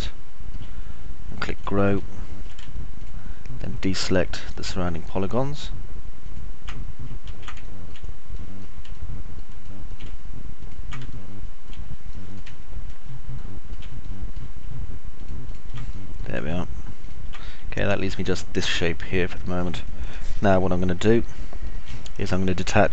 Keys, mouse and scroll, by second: 0.0 alt+click, 0.0 alt+middle click, 0.0 alt+right click, 2.1 alt+click, 2.1 alt+middle click, 2.1 alt+right click, 3.1 ctrl+right click, 7.6 ctrl+z, 8.0 alt+middle click, 8.6 middle click, 9.5 alt+middle click, 10.0 alt+middle click, 10.8 ctrl+right click, 11.5 alt+click, 11.5 alt+middle click, 11.5 alt+right click, 12.5 click, 12.5 middle click, 12.5 right click, 12.8 alt+click, 12.8 alt+middle click, 12.8 alt+right click, 13.6 alt+click, 13.6 alt+middle click, 13.6 alt+right click, 14.5 click, 14.5 middle click, 14.5 right click, 15.5 ctrl+right click, 16.1 click, 16.1 middle click, 16.1 right click, 18.6-19.8 alt+drag, 18.6-19.8 alt+middle drag, 18.6-19.8 alt+right drag, 20.1 click, 20.1 middle click, 20.1 right click, 21.5 alt+click, 21.5 alt+middle click, 21.5 alt+right click.